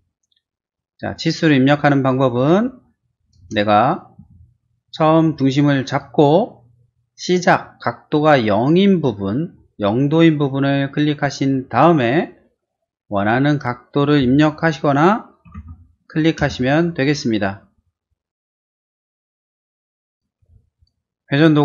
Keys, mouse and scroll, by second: 1.0 middle click, 2.4 q, 3.4 space, 3.8 click, 4.2 q, 5.9 click, 11.7 click, 15.3-16.1 typing, 16.4 Return, 19.1 space, 19.3 click, 20.0 Delete, 20.4 r, 20.7 click.